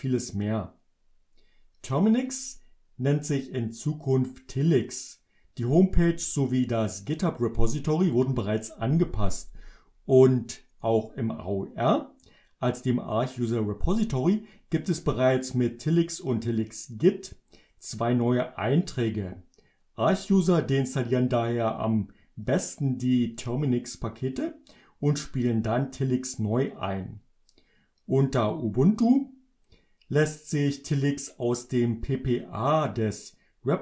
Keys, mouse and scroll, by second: 10.8 click.